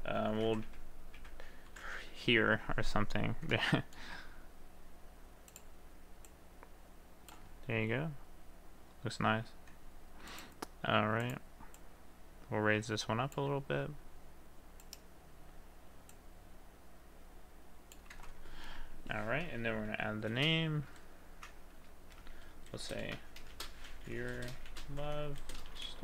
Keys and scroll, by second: 0.3-1.2 typing, 20.2 a, 22.1 space, 23.3 BackSpace, 23.5 y, 24.4 space, 24.8 shift+l.